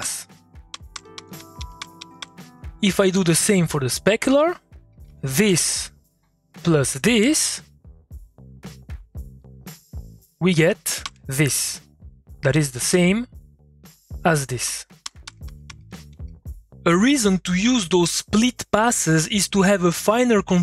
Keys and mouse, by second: 0.0-2.7 typing, 3.2 middle click, 3.5 click, 4.0 middle click, 4.2 click, 4.3 middle click, 4.7 click, 5.1 2, 6.0 click, 6.8 2, 8.3-9.4 drag, 9.8 middle click, 11.0 2, 11.6 middle click, 11.7 click, 12.0 middle click, 12.5 click, 12.8 middle click, 13.9 click, 14.4-16.6 typing.